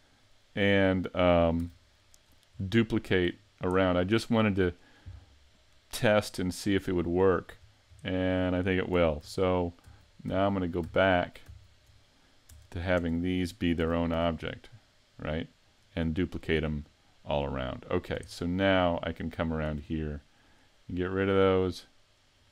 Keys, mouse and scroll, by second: 0.3 middle click, 1.6 a, 2.3 scroll up 1, 2.6 scroll down 1, 2.6 scroll down 4, 3.3 scroll up 5, 3.8 shift+middle click, 5.0 right click, 6.4 shift+middle click, 7.7-8.1 scroll down 2, 8.1 shift+middle click, 9.2 super+z, 9.9 super+z, 10.3 super+z, 10.9 super+z, 11.6 super+z, 12.5 Tab, 13.0 Tab, 13.8 a, 14.1 a, 14.5 scroll down 3, 14.9 z, 15.7 right click, 16.3 shift+middle click, 17.3 right click, 17.7 middle click, 18.3 shift+middle click, 18.8 scroll up 2, 19.5 right click, 20.5 shift+right click, 21.7 right click.